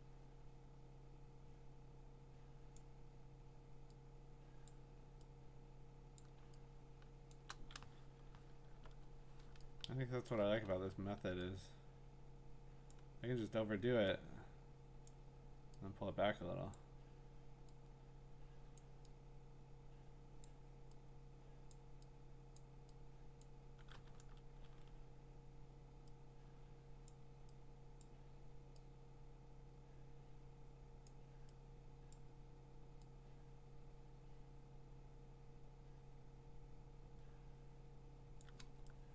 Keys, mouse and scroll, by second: 2.7 click, 4.7 click, 6.2-7.2 click, 6.4 scroll, 6.9 click, 6.9 click, 7.3 click, 7.5 click, 8.2-9.2 scroll, 9.3 scroll, 10.3-12.4 click, 10.6-11.1 scroll, 12.9 click, 15.0 click, 16.7 click, 18.8 click, 20.4 click, 21.7 click, 22.6 click, 23.4 click, 24.2 ctrl+z, 24.6 ctrl+z, 27.1 click, 28.0 click, 31.1 click, 32.1 click, 34.5 click, 38.4-39.1 click.